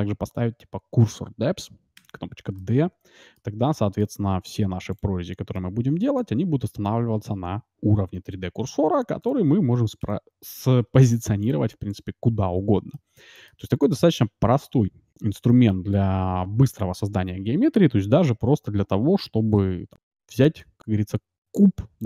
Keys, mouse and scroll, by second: 2.5 scroll up 1, 2.7-5.5 middle drag, 5.7-7.3 middle drag, 11.1-13.8 drag, 12.9-17.5 middle drag, 18.2 d, 19.4 ctrl+shift+x, 20.0-21.8 middle drag.